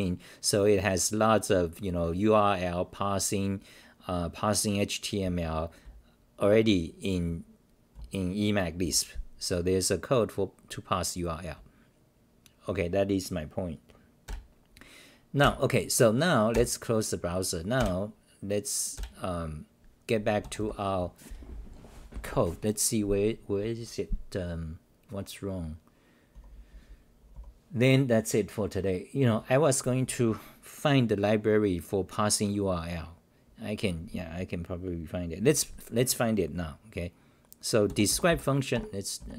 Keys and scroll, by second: 0.7-1.4 typing, 0.9-1.3 scroll down 21, 2.3-2.7 scroll down 1, 3.3-5.4 scroll down 18, 5.8-8.4 typing, 7.9 scroll down 1, 12.0 t, 14.2 ctrl+w, 15.1-15.9 typing, 15.4-16.5 scroll down 1, 16.5 ctrl+w, 17.7 ctrl+w, 19.0 ctrl+w, 20.6 scroll down 137, 22.0-26.3 scroll, 26.3-27.3 typing.